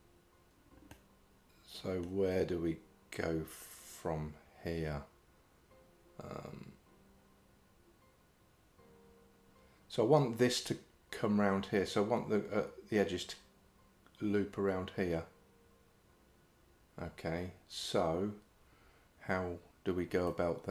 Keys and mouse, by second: 1.0-2.1 middle drag, 20.3 middle click.